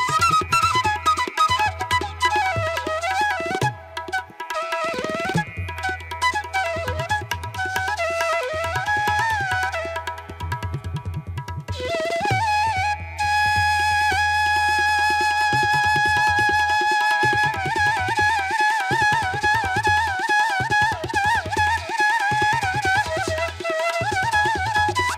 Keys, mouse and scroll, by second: 7.7 ctrl+alt+z, 11.0 ctrl+=, 13.6 ctrl+-, 14.5 ctrl+-, 15.2 ctrl+alt+z, 18.7 ctrl+-.